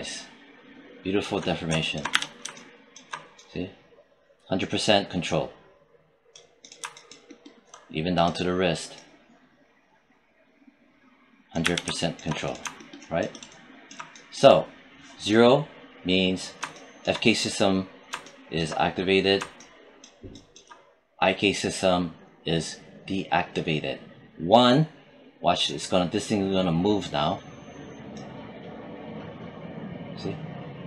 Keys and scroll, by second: 1.9 z, 11.4 z.